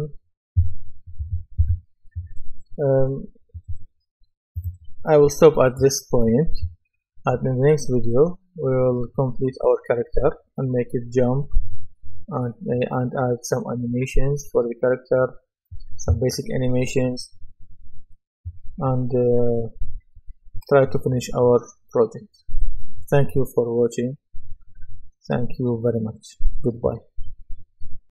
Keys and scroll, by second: 1.6 Escape.